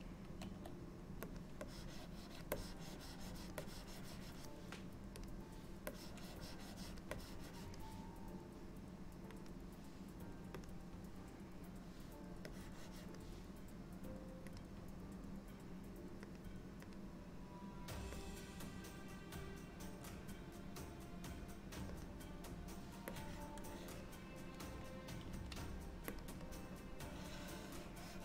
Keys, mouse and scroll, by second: 0.5 f, 1.7 click, 2.6 click, 3.7 click, 5.5 click, 6.0 click, 7.2 click, 9.5 click, 12.6 click, 14.6 click, 17.0 click, 23.2 click, 25.4 f, 26.6 click.